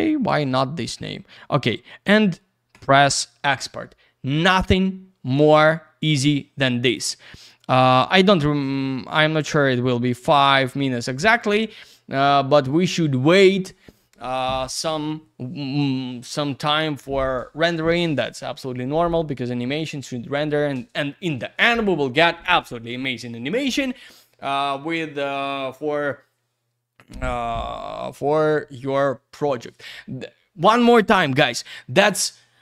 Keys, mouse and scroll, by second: 0.4 click, 2.7 click, 2.8 click.